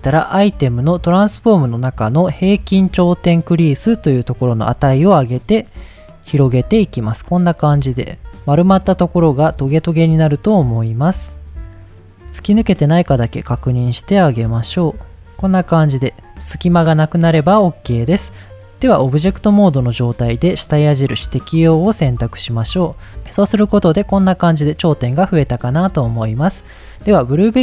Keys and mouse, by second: 4.0-10.8 drag, 11.8 click, 12.3 middle click, 12.9 middle click, 13.4 middle click, 14.0 middle click, 14.8 middle click, 15.2 Tab, 15.4 middle click, 20.3-21.4 drag, 22.8 Tab, 23.5 middle click, 24.1 middle click, 24.8 middle click, 25.2 Tab, 27.4 click.